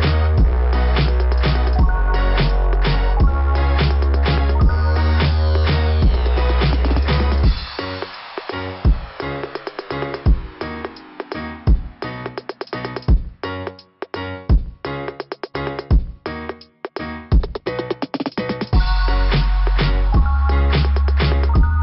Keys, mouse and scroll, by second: 1.7 scroll up 2, 3.4 scroll up 1, 3.7 scroll down 2, 3.8 scroll up 2, 3.9 scroll down 2, 4.2 scroll up 2, 4.2 scroll down 2, 5.2 scroll down 1, 6.6-7.5 scroll down 1, 7.5 click, 9.8 click, 11.6 click, 14.6 click, 15.6 click, 17.1 scroll down 2, 19.7 click, 20.9 click.